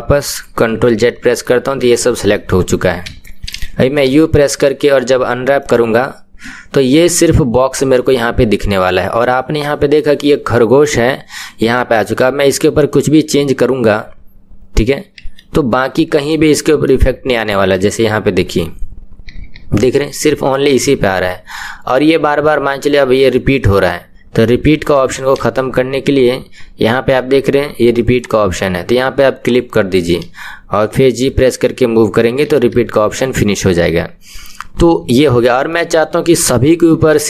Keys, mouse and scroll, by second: 1.0 ctrl+z, 1.8-3.0 middle drag, 3.0 KP_1, 5.7 u, 12.3 g, 15.7 middle click, 16.6 scroll down 1, 16.8-18.5 middle drag, 18.5 g, 24.7 KP_1, 29.5-31.1 drag, 31.1 g, 35.8-37.2 middle drag.